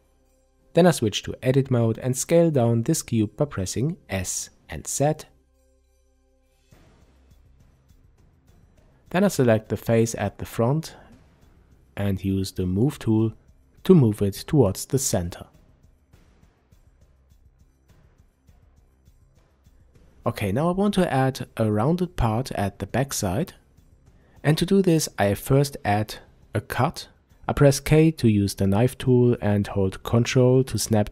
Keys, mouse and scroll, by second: 0.2 Tab, 2.0 s, 6.9 click, 10.3 click, 13.0 click, 15.7 click, 16.9-20.1 drag, 20.1-31.1 middle drag, 24.2 k, 29.7 Return.